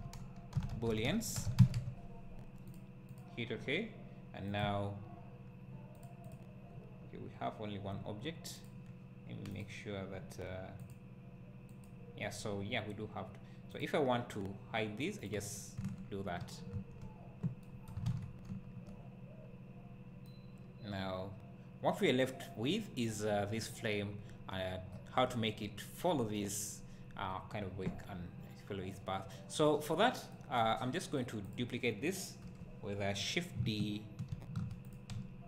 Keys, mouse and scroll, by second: 4.6 click, 15.2 click, 15.9 `, 18.5 `, 19.4 scroll down 1, 20.3-23.7 right drag, 23.7 click, 24.9 `, 29.0-31.5 right drag, 29.9 scroll up 1, 31.5 click, 32.4 KP_7, 34.3 shift+d, 34.9 click.